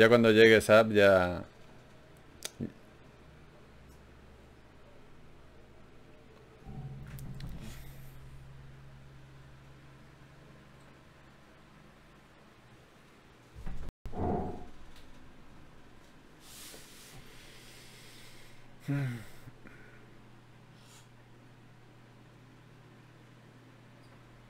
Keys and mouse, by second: 0.5 g, 1.4 click, 1.9 Tab, 3.6 Tab, 5.2 middle click, 5.4 g, 8.2-9.6 middle drag, 9.6-12.7 right drag, 12.7-14.2 middle drag, 14.2-16.5 right drag, 16.9 right click, 17.8 middle click, 18.0 right click, 18.8-19.9 middle drag, 20.2-23.4 drag, 20.2 d.